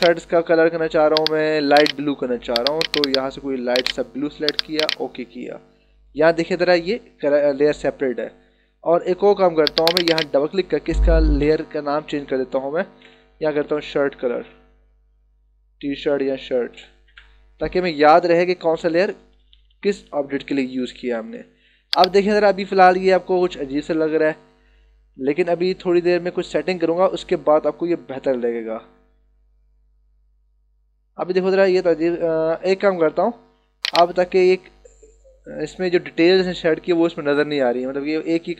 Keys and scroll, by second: 11.4 BackSpace, 12.6-14.3 typing, 16.2 shift+c, 16.6 BackSpace, 17.0 Return, 19.2 [.